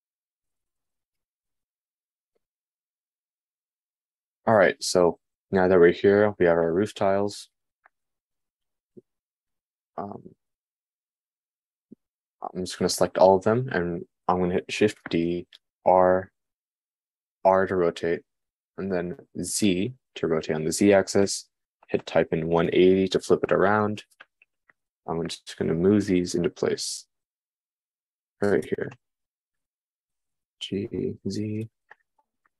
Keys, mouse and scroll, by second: 10.0 shift+click, 15.5 shift+d, 30.6 g.